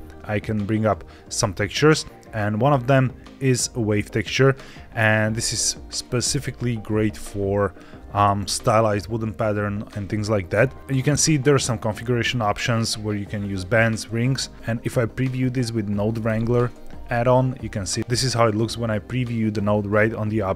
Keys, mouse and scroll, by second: 6.9-7.6 scroll up 2, 7.6 middle click, 11.7-13.3 drag, 16.3 ctrl+shift+click.